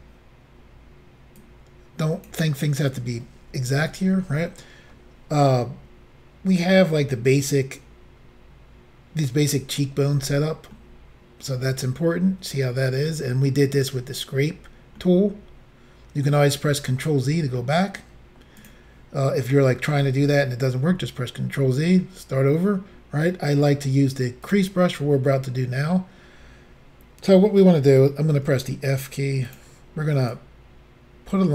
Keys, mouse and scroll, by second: 1.4 click, 10.8 middle click, 15.1 middle click, 18.6 click, 24.5 click, 28.4 f, 29.5 click, 30.4 click.